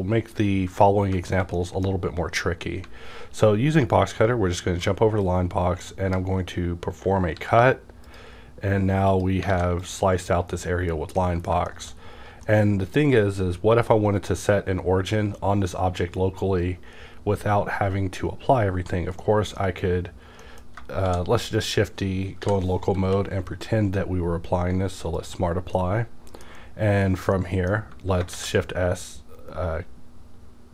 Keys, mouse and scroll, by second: 1.5-3.6 shift+middle drag, 3.8 alt+scroll up 1, 4.4 alt+scroll down 1, 5.2-8.0 drag, 7.3 x, 9.1 click, 9.5 a, 9.8 click, 9.8 a, 11.2 middle click, 11.6 shift+middle click, 12.0-12.4 scroll up 1, 12.4-21.0 middle drag, 21.0 shift+d, 21.4 right click, 22.4 /, 22.9 q, 25.7-30.7 middle drag, 25.7 click, 28.3 shift+s.